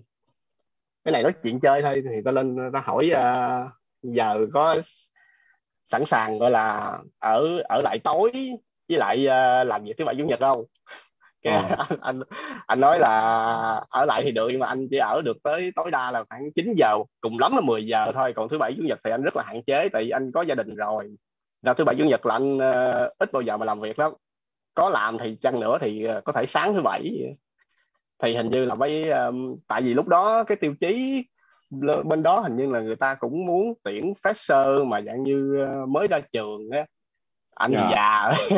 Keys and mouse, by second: 9.6 click, 14.6 click, 25.0 click.